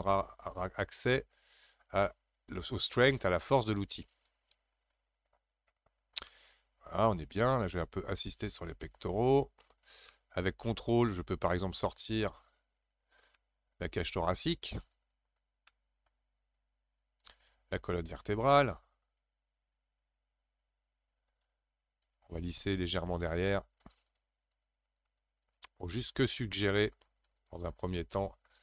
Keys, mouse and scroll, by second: 4.9-6.3 drag, 6.3-8.1 middle drag, 8.1-10.1 drag, 10.1-11.4 middle drag, 11.4-13.3 ctrl+drag, 13.3-14.7 middle drag, 14.7-15.7 ctrl+drag, 15.7 middle click, 16.5-21.4 ctrl+drag, 22.0-26.6 shift+drag, 26.6 middle click, 27.3 shift+click, 28.1 middle click.